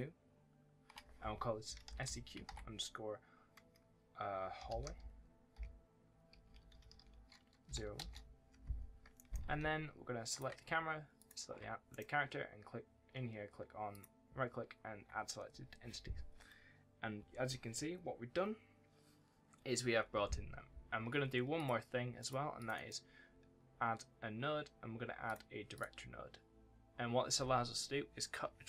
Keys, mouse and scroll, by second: 9.1 right click, 9.3 d, 10.2 click, 11.8 right click, 13.8 click, 21.5 click, 22.7 right click, 25.2 click, 26.6 scroll up 1, 26.8-27.3 scroll down 1.